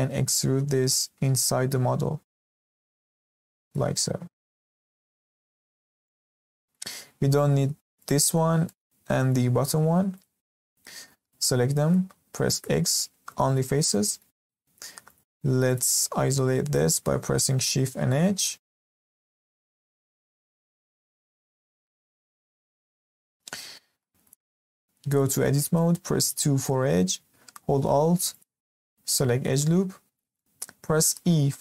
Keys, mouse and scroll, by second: 4.2-5.8 scroll down 1, 5.8 scroll up 1, 6.0-7.9 middle drag, 7.9 click, 8.6 middle click, 9.5-10.1 scroll up 1, 10.1 shift+click, 10.7-11.0 scroll down 1, 11.0-12.5 middle drag, 12.5 x, 13.8 middle click, 14.4 Tab, 15.0 click, 15.7 click, 17.8 shift+h, 18.4-20.0 middle drag, 20.0-20.4 scroll up 2, 20.4-21.3 shift+middle drag, 21.3 scroll up 2, 21.6-22.1 shift+middle drag, 22.1 click, 22.5-23.7 middle drag, 23.7 scroll up 2, 24.0-25.1 middle drag, 25.1 click, 25.3 Tab, 26.2 2, 28.3 alt+click, 30.3-31.0 middle drag, 31.0 e.